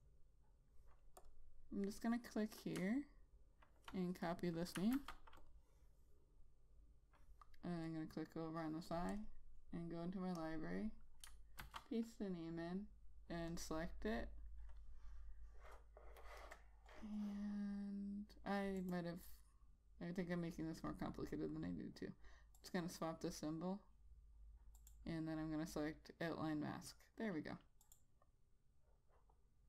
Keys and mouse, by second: 0.4 click, 3.2 click, 4.7 click, 5.7 ctrl+c, 5.9 click, 12.1 ctrl+v, 14.0 click, 19.2 right click, 23.0 click.